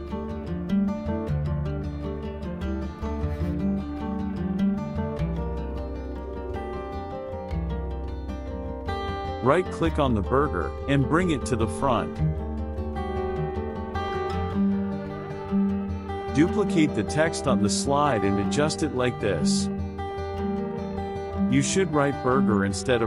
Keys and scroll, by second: 11.8 KP_Subtract, 15.6 ctrl+d, 20.7-22.2 typing.